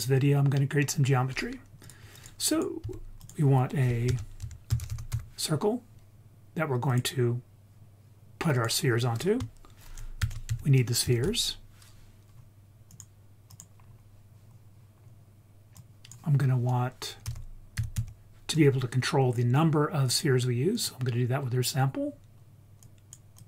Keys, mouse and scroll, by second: 0.5-1.8 scroll up 3, 1.8 click, 2.1 click, 2.5 click, 2.8 x, 3.1 click, 4.0 shift+a, 8.9-9.3 scroll up 1, 10.1 shift+a, 13.8-14.4 scroll up 3, 14.4-15.0 scroll down 1, 15.0-15.7 scroll down 1, 15.7-20.2 drag, 20.7 click, 21.5-22.8 scroll down 2, 22.8 click, 23.3-23.4 drag.